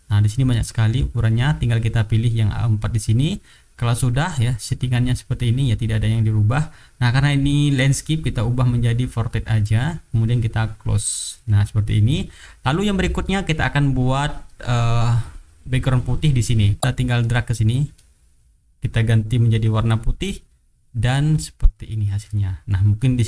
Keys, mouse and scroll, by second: 2.6 click, 4.4 click, 9.3 click, 11.1 click, 11.7 middle click, 12.6 middle click, 15.5 click, 17.2-18.9 drag, 20.0 click, 21.3-21.8 drag, 22.2 click, 22.6 middle click, 22.9 middle click.